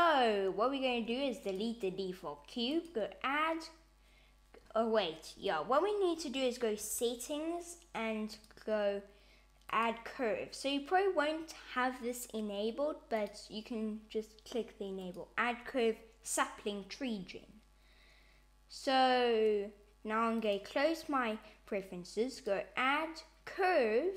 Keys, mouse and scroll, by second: 0.9 x, 2.7 click, 6.8 super+,, 22.3 click.